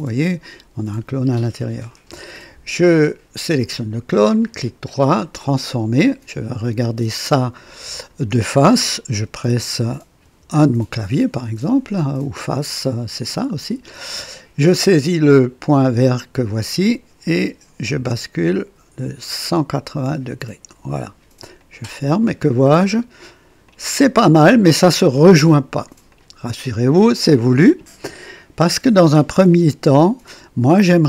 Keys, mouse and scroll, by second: 1.7 click, 3.3 click, 4.3 right click, 5.4 click, 6.6-8.3 drag, 10.2 KP_1, 13.3 click, 15.8-20.9 drag, 21.6 click, 22.4 click, 23.7 click, 25.1 click, 26.2 click, 26.6 click, 30.4-31.0 drag.